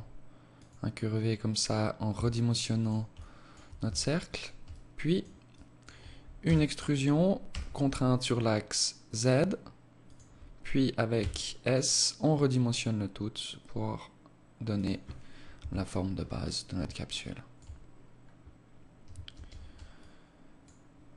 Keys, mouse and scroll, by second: 1.5 s, 2.6 alt+click, 3.2 s, 4.2 alt+click, 5.0 alt+click, 5.8 e, 10.6 s, 15.0 KP_1, 15.6-16.5 scroll up 2, 16.5 alt+shift+click, 17.8 scroll up 1, 18.7 ctrl+space, 19.4 alt+click, 20.6 alt+click.